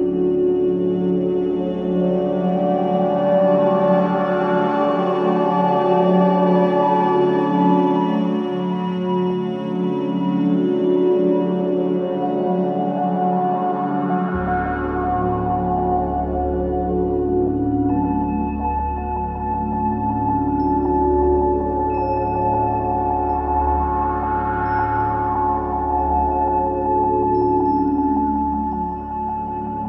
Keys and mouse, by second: 1.6-3.3 shift+drag, 3.8-4.6 alt+drag, 5.1 drag, 6.8-8.3 drag, 8.9 alt+click, 9.9 click, 12.0 click, 13.5 alt+click, 14.2 alt+click, 15.7-20.1 drag, 20.6-21.6 drag, 24.3-27.2 shift+drag, 28.8 click, 29.7 click.